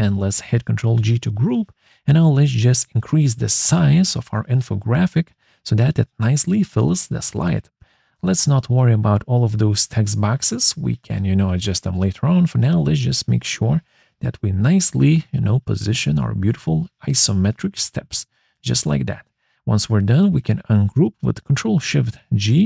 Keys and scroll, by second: 20.1 ctrl+shift+(.